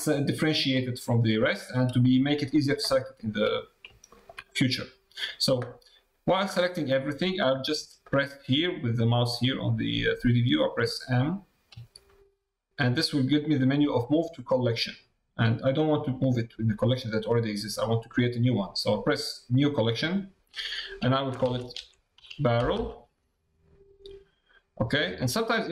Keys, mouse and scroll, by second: 3.0 shift+middle click, 3.5 shift+middle click, 4.4 middle click.